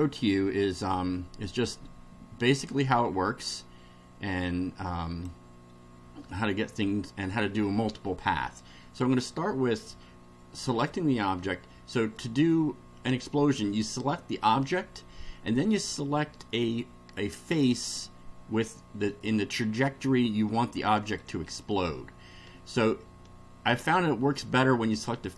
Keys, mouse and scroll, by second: 0.0 click, 2.5 click, 4.5 click, 6.2-7.2 middle drag, 10.7 click, 11.5-12.3 middle drag, 17.4-18.2 shift+middle drag, 20.5-21.4 ctrl+middle drag, 21.5-25.3 ctrl+middle drag.